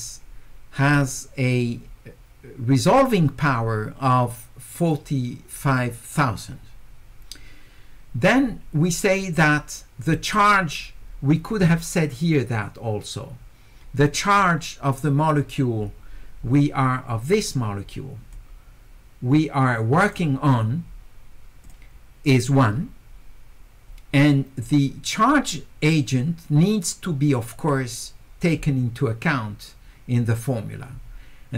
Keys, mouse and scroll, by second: 17.3 click, 18.3-20.1 drag.